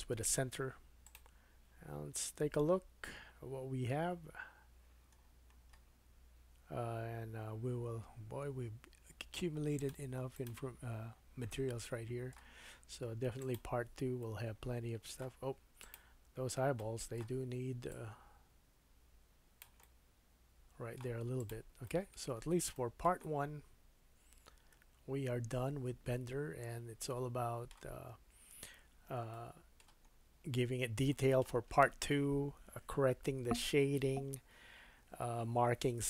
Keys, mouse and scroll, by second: 1.0-9.9 drag, 5.2-8.3 scroll down 4, 8.3-9.8 scroll down 3, 9.9 middle click, 10.3 click, 11.8 shift+middle click, 13.4 click, 14.2 middle click, 15.8 click, 16.8-17.9 middle drag, 17.9-21.5 drag, 19.8 middle click, 21.5-36.0 middle drag, 22.3-22.7 scroll up 2, 30.1-30.5 scroll down 2, 30.6 scroll up 1.